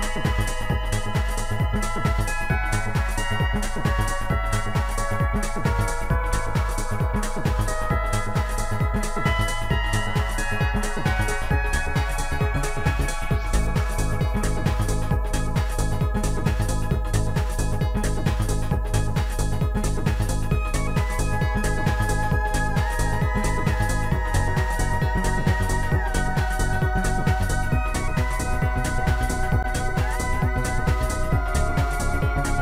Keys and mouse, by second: 0.7 click, 4.2 click, 4.5 click, 5.4 click, 7.1 click, 8.8 click, 10.8 click, 11.9 click, 13.6 click, 15.1 click, 21.3 click, 24.0 click, 27.9 click, 30.5 click, 31.1 click.